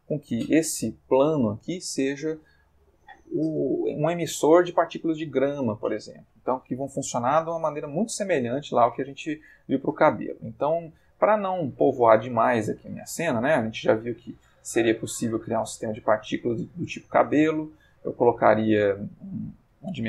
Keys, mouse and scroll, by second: 0.2-1.6 ctrl+middle drag, 6.0-6.6 middle drag, 9.1-10.1 middle drag, 10.2-11.1 ctrl+middle drag, 14.1 click, 14.9 click, 15.9 click, 18.3 click, 18.9 Escape, 19.2 click.